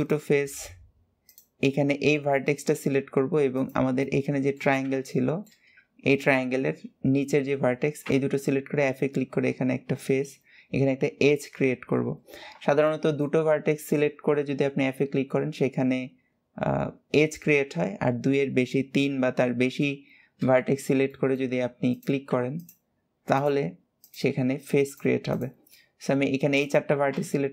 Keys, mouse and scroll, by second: 0.6 scroll down 1, 1.1 click, 1.5-2.1 scroll down 4, 2.1-3.3 shift+middle drag, 3.3 shift+click, 3.8 middle click, 4.5 alt+z, 4.9 shift+middle click, 5.5-7.9 scroll up 2, 7.9 f, 11.2 KP_7, 12.7-15.8 shift+middle drag, 20.9 shift+middle click, 21.7 click, 22.3 shift+click, 23.1 click, 23.8 shift+click, 24.7 shift+click, 25.1 shift+click, 25.5-26.9 middle drag, 26.9 f, 27.4 scroll down 2.